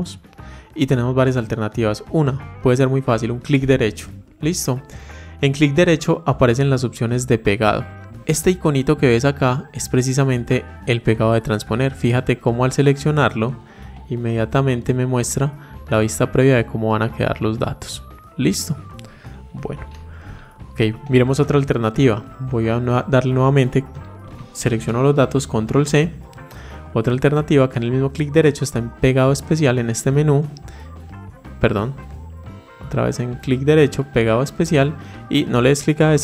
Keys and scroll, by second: 24.1 ctrl+c.